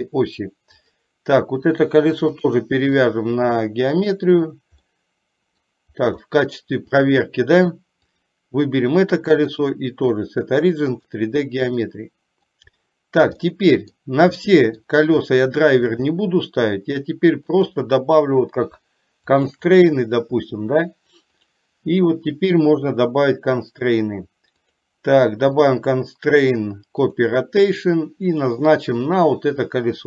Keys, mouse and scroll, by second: 1.0 click, 2.5-4.3 drag, 5.0 middle click, 6.4 shift+middle click, 8.1 click, 9.8-11.3 drag, 12.0 middle click, 13.6 middle click, 14.6 middle click, 15.5 shift+middle click, 16.3 middle click, 17.6 click, 19.4 shift+click, 21.5 click, 24.6 click, 25.5-27.4 drag, 28.4 click.